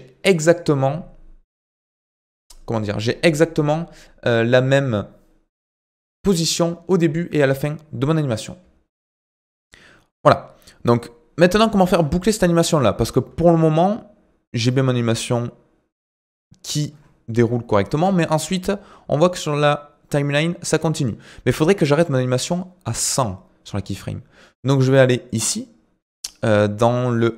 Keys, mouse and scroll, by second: 8.9 ctrl+alt+KP_8, 11.0 click, 11.8 space, 17.8 space, 18.9-21.9 drag, 25.3 click.